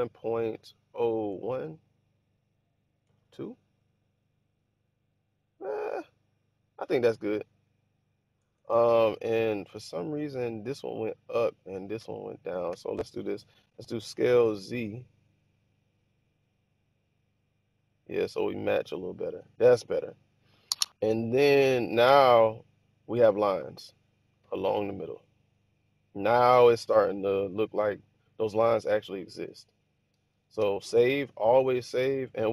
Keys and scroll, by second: 0.7 0, 1.1 1, 2.8 BackSpace, 3.0 2, 8.3 Return, 12.6 1, 13.9-15.0 typing, 22.0 Tab, 28.7 1, 30.9 super+s.